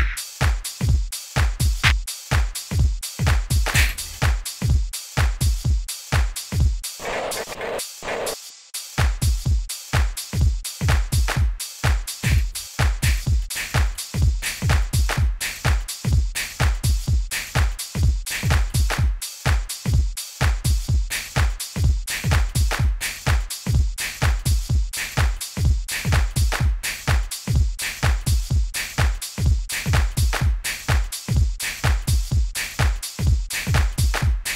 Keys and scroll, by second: 0.4 Down, 8.3 super+z, 12.2 e, 21.0 e, 34.2 super+u.